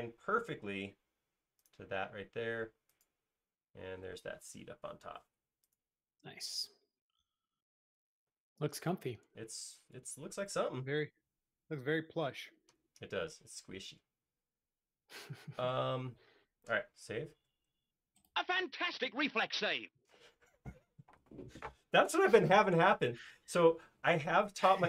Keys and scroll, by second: 2.3 space, 17.4 super+s.